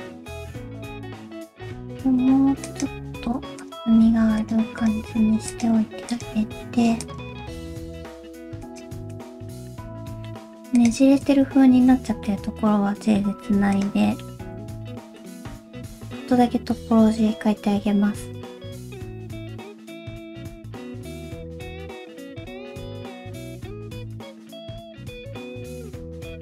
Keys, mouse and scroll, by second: 0.2 shift+click, 0.4 alt+a, 0.5 alt+z, 0.6 c, 1.2 shift+middle click, 1.4 alt+z, 1.6 g, 3.1 alt+z, 3.6 click, 4.1 g, 4.8 click, 5.0 g, 6.1 click, 6.4 g, 7.9 click, 8.2 g, 9.1 click, 9.6 middle click, 10.8 shift+click, 11.9 j, 12.3 middle click, 13.5 2, 13.8 click, 14.1 middle click, 14.4 x.